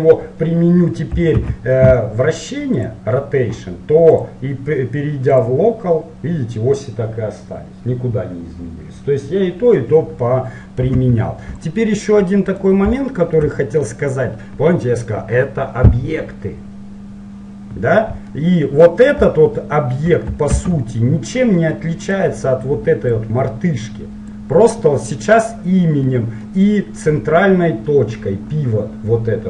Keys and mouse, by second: 1.4 ctrl+a, 4.3-7.3 drag, 11.1 Delete, 12.7-15.2 drag, 15.2-18.0 middle drag, 18.1-20.7 middle drag, 20.7 shift+a, 23.3-25.1 drag, 26.1-28.9 middle drag.